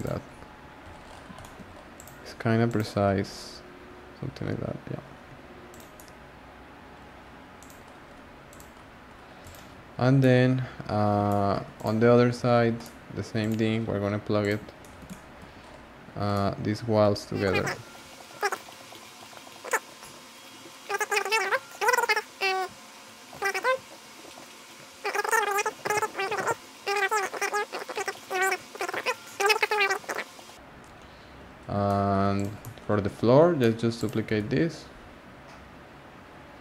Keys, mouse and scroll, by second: 0.0 click, 0.3 scroll down 2, 0.4-1.9 scroll up 12, 1.4 shift+middle drag, 1.9 click, 2.6 click, 3.2 scroll up 3, 4.3-5.3 scroll down 10, 5.7 click, 5.9 scroll down 1, 5.9-7.6 middle drag, 7.6 click, 7.6-8.1 scroll down 6, 8.1-8.5 scroll up 2, 8.5 click, 8.8-10.1 scroll down 12, 9.4 click, 10.2-11.7 middle drag, 11.7 click, 11.9-12.8 scroll down 6, 12.8-13.4 middle drag, 13.4 click, 14.4 click, 14.8-15.5 shift+middle drag, 15.5-16.3 scroll up 5, 16.3-17.8 shift+middle drag, 17.8 g, 19.7 drag, 19.8 g, 20.4 click, 20.4-22.0 scroll down 28, 20.7 middle click, 21.1-21.5 shift+middle drag, 21.7 shift+middle drag, 21.9 middle drag, 22.0-22.8 shift+middle drag, 23.0 middle drag, 23.2 click, 23.6 z, 23.6 middle drag, 23.8 g, 24.2 z, 24.3 shift+d, 26.0 z, 26.2 r, 27.1 scroll, 28.0-28.8 scroll, 28.9 click, 28.9 scroll down 1, 29.0 scroll up 2, 29.1 scroll down 1, 29.1 scroll up 1, 29.2 scroll down 1, 29.2 scroll up 1, 29.3 scroll down 3, 29.4-30.0 shift+middle drag, 30.0 scroll down 1, 30.1 scroll up 1, 30.1 scroll down 3, 30.3 scroll up 1, 30.4-31.5 shift+middle drag, 31.5-31.8 scroll up 1, 31.8-32.3 shift+middle drag, 32.3 click, 32.6-33.1 middle drag, 33.1-33.6 scroll down 3, 33.6-33.9 middle drag, 33.9 click, 34.3 shift+d.